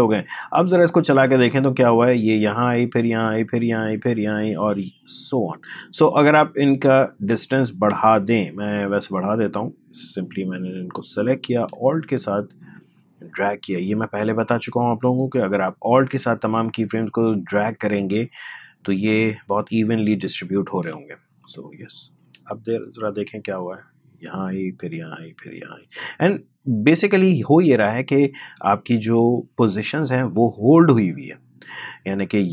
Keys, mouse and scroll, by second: 1.1 space, 5.5 space, 7.0 click, 12.0 alt+click, 32.0 space.